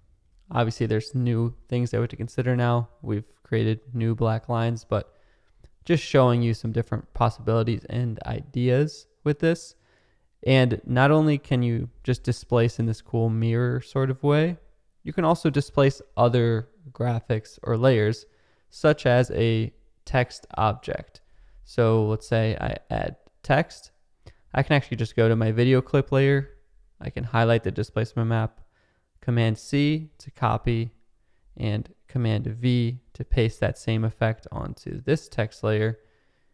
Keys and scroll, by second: 0.2 space, 4.5 super+z, 5.6 super+z, 19.9-21.8 typing, 29.6 super+c, 32.6 super+v.